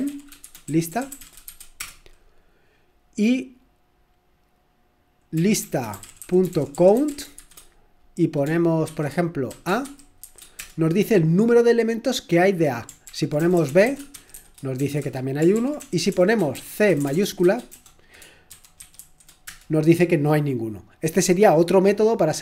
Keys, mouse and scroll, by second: 0.0-2.0 typing, 5.2-10.7 typing, 13.1 ctrl+p, 13.4-14.3 typing, 15.0 Return, 15.4-16.1 typing, 15.5 ctrl+p, 19.2-20.0 typing, 22.3 typing.